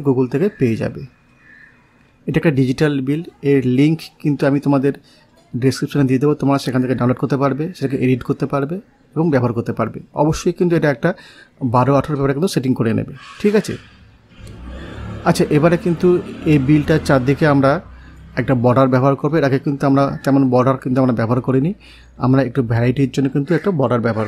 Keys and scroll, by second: 12.7 ctrl+z, 15.3 8, 15.9 Return.